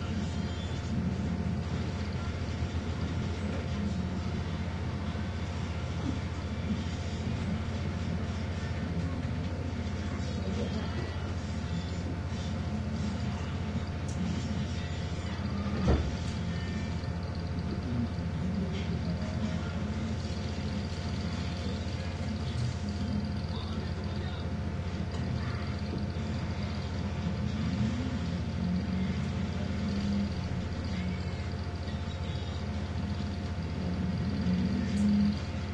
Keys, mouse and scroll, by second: 1.5 click, 2.6 click, 3.6 click, 5.4-6.6 drag, 6.8 click, 8.2 shift+Up, 11.0 click, 13.3 click, 14.8-17.9 drag, 21.1 click, 22.1-22.6 scroll down 1, 22.8-24.1 scroll up 1, 25.4 click, 29.2 click, 30.7-31.8 scroll down 3, 33.1 click, 33.9 click.